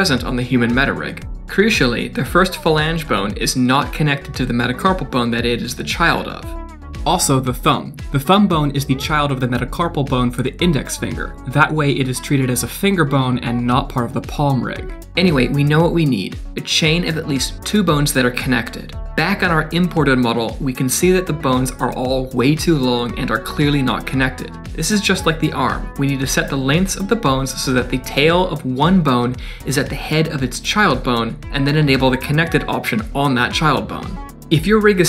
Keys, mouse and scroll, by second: 0.0 click, 1.0 click, 1.5 Tab, 2.3 middle click, 3.7 g, 4.8 middle click, 6.3 click, 15.1-15.8 scroll down 5, 15.4 middle click, 15.9 shift+middle click, 17.4 click, 17.7 scroll up 2, 17.9 shift+middle click, 18.3 Tab, 18.6 click, 18.8 Tab, 19.4 scroll up 3, 19.7 shift+middle click, 20.2 KP_Decimal, 20.5 scroll down 3, 20.8 middle click, 21.3-21.7 scroll up 2, 22.2 click, 22.8 g, 24.7 click, 25.4 click, 27.4 click, 28.3 click, 34.0 click, 34.2 scroll down 2, 34.5 d, 34.8 KP_1, 35.0 scroll down 1.